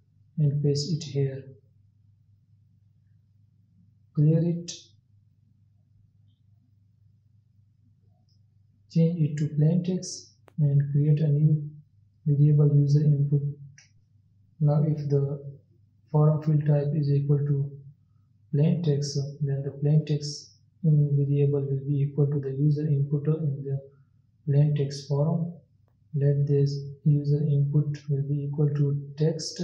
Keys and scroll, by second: 2.0 ctrl+v, 9.4 ctrl+x, 24.4 ctrl+z, 24.7 ctrl+s.